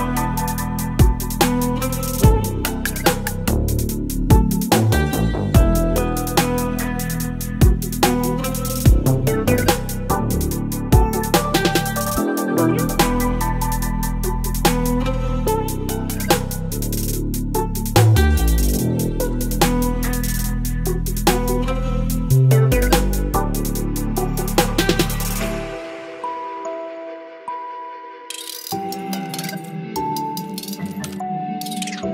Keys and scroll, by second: 0.2 ctrl+d, 2.1 space, 6.4 ctrl+BackSpace, 6.8 ctrl+d, 10.8 Delete, 11.1 ctrl+d, 11.3 ctrl+v, 14.8 space, 17.6 l, 23.8 ctrl+BackSpace, 24.1 ctrl+d, 25.0 space.